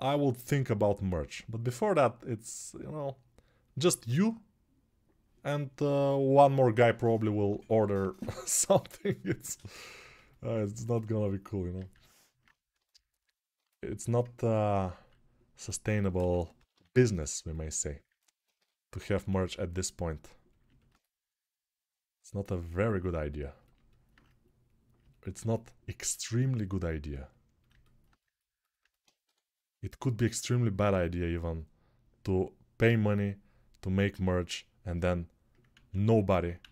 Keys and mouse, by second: 8.0 1, 12.1 alt+q, 15.0 alt+q, 16.0 6, 16.3 ], 16.5 ], 18.3 g, 18.7 ], 29.0 6, 34.4 r, 34.7-36.7 middle drag, 35.5 ctrl+z, 36.4 ctrl+z.